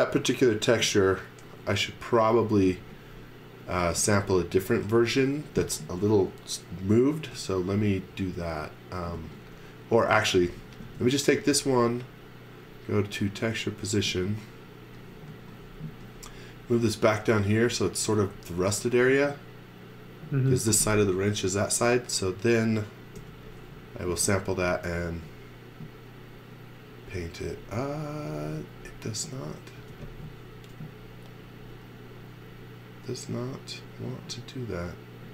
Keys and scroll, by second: 2.9 z, 3.8 space, 3.9 z, 7.3 space, 8.3 space, 9.1 z, 10.5 x, 10.8 space, 11.8 space, 23.2 n, 29.8 space.